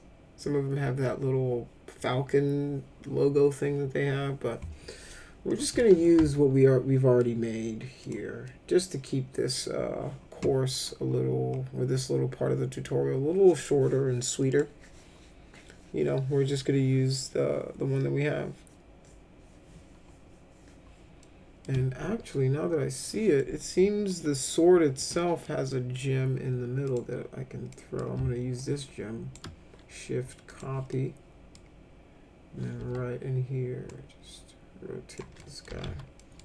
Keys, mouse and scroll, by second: 5.5 middle click, 6.0-7.2 alt+middle drag, 8.0 click, 8.5 middle click, 14.5 click, 21.2 middle click, 23.4 middle click, 25.1 middle click, 25.7 middle click, 26.9 click, 27.7 middle click, 28.5 shift+click, 30.5 click, 30.9 middle click, 32.8 e, 33.9-35.2 drag, 35.4 middle click, 35.4-36.4 typing, 36.2 middle click.